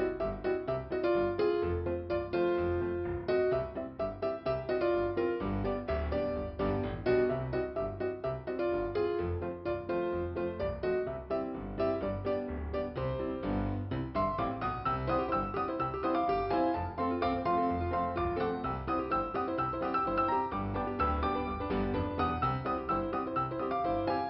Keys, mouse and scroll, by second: 0.8 click, 1.7 click, 2.1 scroll down 3, 4.8 ,, 4.9 click, 6.2 click, 6.7 click, 8.7 click, 10.1 click, 10.8-11.2 scroll down 1, 13.0 click, 14.4 click, 18.1 scroll up 1, 19.0 click.